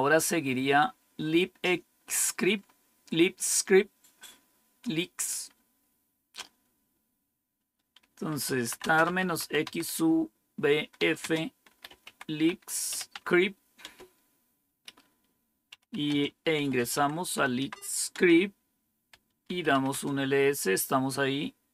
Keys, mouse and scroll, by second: 2.4-3.7 scroll up 1, 3.7-4.4 scroll up 1, 5.4-8.2 scroll up 2, 8.0-13.8 typing, 15.8 Return, 16.5-19.9 typing.